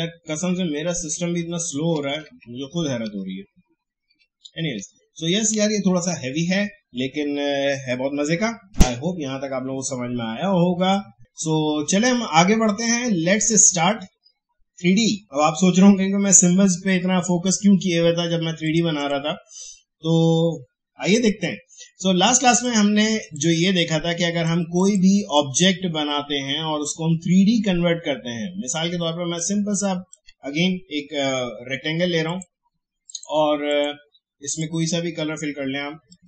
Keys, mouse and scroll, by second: 0.4 alt+scroll down 1, 12.7 click, 15.2 click, 18.6 click, 22.5-32.3 drag.